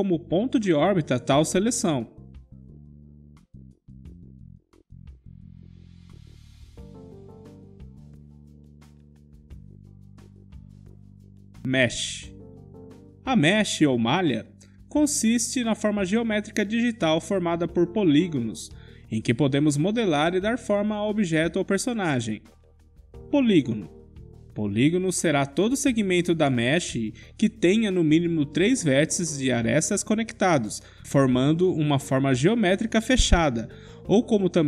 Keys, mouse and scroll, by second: 3.6-6.2 middle drag, 6.5 click, 8.5-11.8 middle drag, 13.2-15.4 drag, 16.1-18.1 middle drag, 19.2 Tab, 20.0 click, 20.5 Tab, 21.4 click, 22.1-23.2 middle drag, 23.1 KP_Decimal, 23.4 middle click, 25.0 Tab, 25.4 Tab, 27.7-28.8 middle drag, 29.5 Tab, 29.5 KP_Decimal, 30.4-33.9 middle drag, 33.1 Tab.